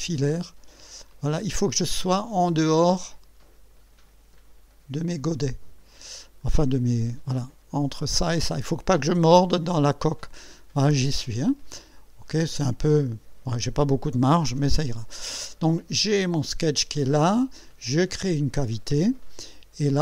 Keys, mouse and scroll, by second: 6.4-6.7 scroll up 1, 12.5 click, 18.4 click.